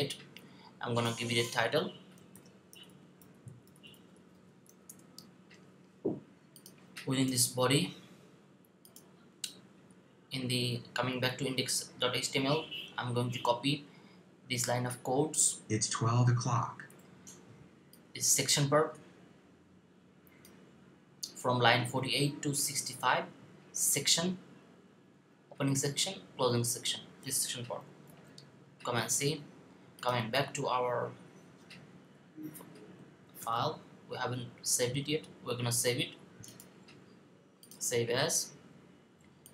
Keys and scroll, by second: 2.2-4.4 typing, 27.9 super+c, 33.2 super+v.